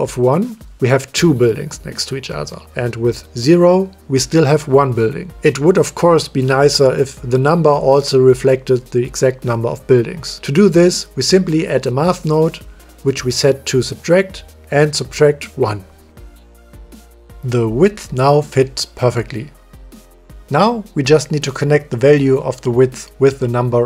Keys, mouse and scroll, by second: 1.3 middle click, 2.4 click, 5.4 click, 6.5 middle click, 10.5 click, 10.9 click, 12.4 click, 12.9 shift+d, 14.4-15.1 drag, 16.1 click, 16.8 click, 17.5 click, 18.1 click, 19.2 click, 20.5 click, 22.8 middle click.